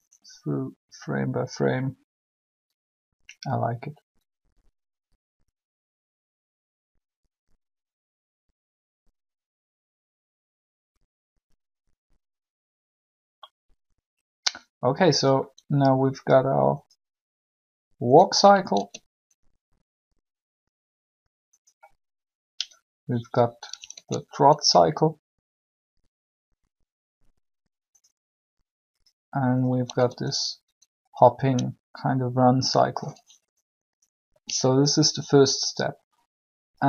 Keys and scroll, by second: 18.6 alt+a, 23.8 alt+a, 29.9 alt+a.